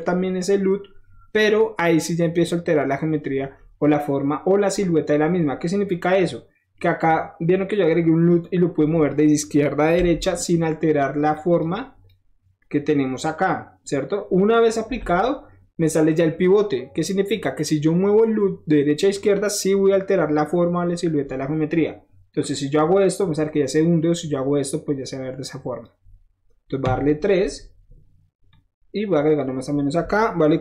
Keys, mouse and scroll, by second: 3.6 middle click, 3.7 middle click, 4.0 middle click, 5.6-6.7 middle drag, 10.0 typing, 10.2 click, 10.6 click, 11.3 drag, 11.7-12.0 drag, 12.6-14.7 drag, 22.4-25.8 drag, 28.4 click.